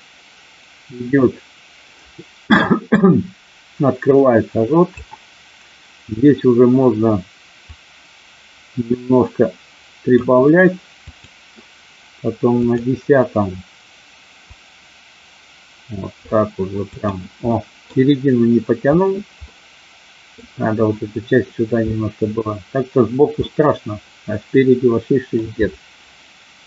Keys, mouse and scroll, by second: 7.8-10.1 drag, 11.1 click, 12.6 click, 14.5-16.4 drag, 16.9 click, 17.5 middle click, 19.5 middle click, 21.9-23.1 middle drag, 23.4-25.3 middle drag.